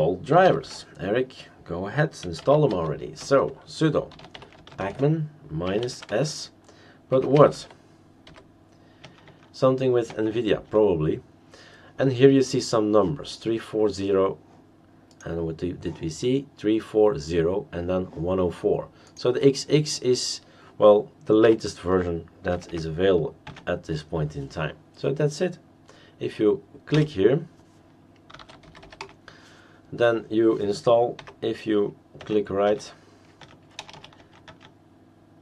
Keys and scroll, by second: 0.4 ctrl+alt+t, 2.0-8.2 typing, 9.0 Tab, 9.2 Tab, 10.1 Tab, 10.7 Tab, 21.4 -, 22.5 typing, 23.4 Tab, 26.9 Return, 28.1-29.3 typing, 31.2 Up, 32.2 Tab, 32.6 Tab, 33.4 Tab, 33.8 BackSpace, 33.9 BackSpace, 34.2 Tab, 34.5 Tab.